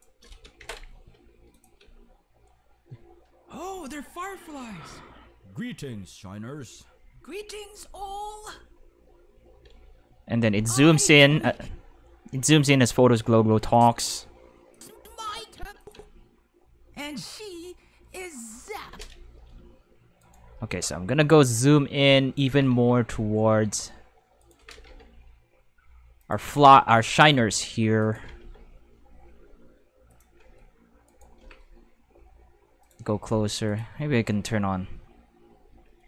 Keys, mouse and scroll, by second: 0.6 ctrl+s, 1.5 click, 1.8 space, 9.0 space, 9.6 space, 9.7 5, 11.5 space, 11.7 5, 13.7 click, 14.7 click, 14.9 space, 15.1 5, 15.5 space, 15.8 click, 15.9 space, 18.8 space, 19.3 g, 20.2 right click, 20.5 g, 22.2-23.2 typing, 22.4 click, 24.4 right click, 24.5 g, 24.9 x, 26.1-28.7 typing, 26.2 click, 28.0 click, 30.1 click, 30.1-32.0 typing, 31.0 right click, 32.8 click, 33.7 click, 35.5-36.0 typing.